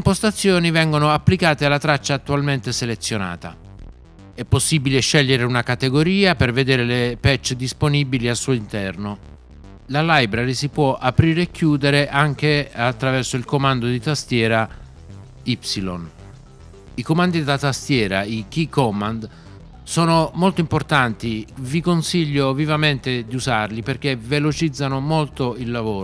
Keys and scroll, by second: 15.5 y.